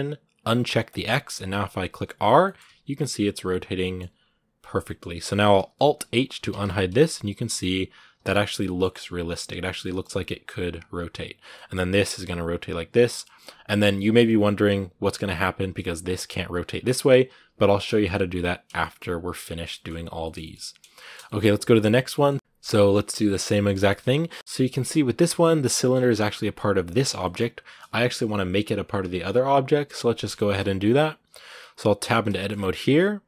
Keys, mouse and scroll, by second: 0.7 click, 1.3 r, 2.2 middle click, 2.4 r, 3.6 middle click, 3.8 r, 4.6-6.3 middle drag, 6.3 alt+h, 6.7 right click, 7.0 r, 8.4 middle click, 8.7 r, 9.6 middle click, 9.9 r, 11.1 right click, 11.3 middle click, 13.0 middle click, 13.2 scroll up 2, 13.5 middle click, 15.7 right click, 17.7 middle click, 17.9 scroll down 2, 18.6-21.5 shift+middle drag, 21.5 right click, 21.9-23.8 middle drag, 23.8-24.2 scroll up 1, 24.2 middle click, 24.4 Tab, 24.5 middle click, 25.2-25.7 scroll up 1, 25.7 scroll down 2, 26.0 g, 26.9 scroll up 2, 27.0-28.6 middle drag, 28.6-30.1 right drag, 30.1 shift+middle click, 30.3 shift+scroll up 2, 31.1 right click, 31.4 middle click, 31.8 Tab, 32.1-33.2 shift+middle drag.